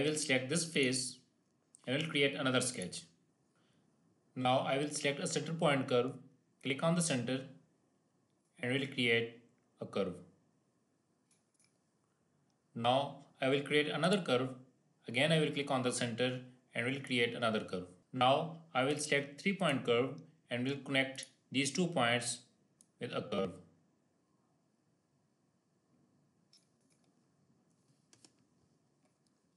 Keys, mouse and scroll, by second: 0.6 click, 3.0 click, 4.2-5.2 scroll down 1, 6.5 click, 8.3-11.4 drag, 13.9 click, 16.9 click, 17.2 click, 18.0 ctrl+z, 18.8 click, 23.0-26.4 drag.